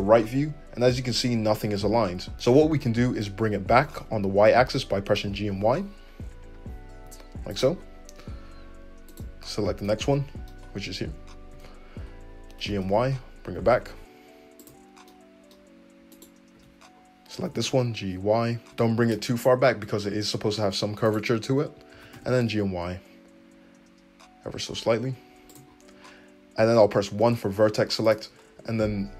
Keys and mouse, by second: 3.4 g, 9.1 click, 9.2-16.1 middle drag, 11.5 `, 12.6 g, 16.1 click, 16.2-21.0 middle drag, 16.5 `, 17.4 g, 18.7 `, 21.0 click, 21.1 middle click, 21.9 g, 27.6 1, 28.0 click, 28.7 g.